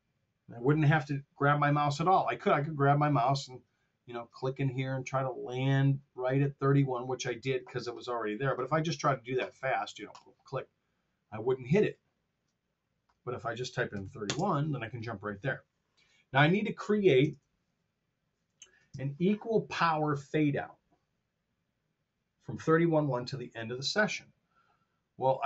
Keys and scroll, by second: 13.9-14.3 typing, 17.2 super+Tab, 18.9 super+Tab.